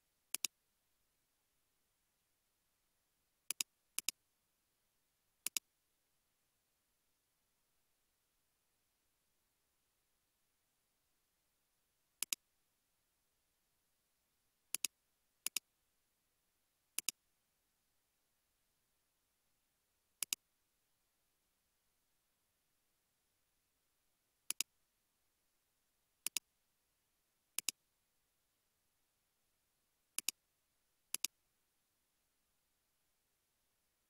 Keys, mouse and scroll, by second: 4.0 double click, 7.7-8.4 scroll down 1, 15.9 typing, 17.0-18.0 typing, 19.1 typing, 23.0 typing, 25.5 typing, 31.6-32.5 typing.